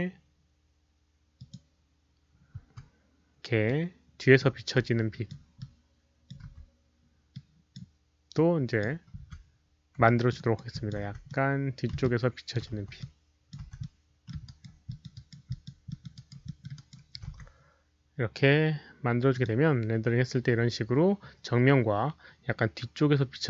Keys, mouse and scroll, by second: 0.8 ctrl+d, 0.8 middle click, 0.8 click, 0.8 w, 1.3 click, 2.1 ctrl+d, 2.1 click, 2.1 w, 2.5 e, 3.6-4.3 drag, 4.1-4.8 typing, 4.3 middle click, 4.7-5.2 drag, 5.5-6.2 drag, 6.8-9.6 typing, 7.3 ctrl+d, 7.3-7.7 drag, 7.3 middle click, 8.3-8.7 drag, 8.3 middle click, 8.7 middle click, 10.0 alt+drag, 10.3 alt+right click, 10.7 alt+click, 11.0 w, 11.2-11.8 middle drag, 12.0-12.5 alt+drag, 12.2-15.3 typing, 12.5 middle click, 12.5 alt+right click, 12.7 middle click, 12.7 alt+right click, 12.9-13.4 alt+drag, 13.7-14.2 middle drag, 14.4 alt+right drag, 14.8 alt+click, 15.1 alt+right drag, 15.4 alt+drag, 15.8 alt+middle drag, 16.1 alt+right drag, 16.4 alt+middle drag, 16.7 alt+right click, 17.2 alt+middle click, 17.2 alt+click, 17.2 q, 18.1 alt+right click, 18.1 alt+middle click, 18.1 alt+click, 18.1 q, 19.2 alt+click, 19.2 alt+right click, 19.2 alt+middle click, 19.2 q, 21.4 click, 21.4 alt+right click, 21.4 alt+middle click, 21.4 q, 23.4 alt+click, 23.4 alt+right click, 23.4 alt+middle click, 23.4 q.